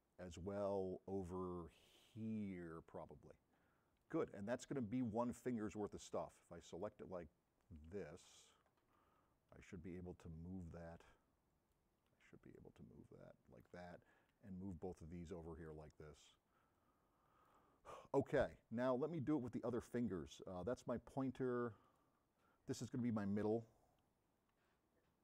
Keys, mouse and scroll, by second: 5.0-5.8 middle drag, 5.8-6.9 drag, 8.1 shift+click, 10.9 m, 12.6-13.8 middle drag, 15.3-15.9 drag, 16.4-17.7 drag, 16.4 m, 19.4 middle click, 21.9 click, 24.7-25.2 drag, 24.7 m.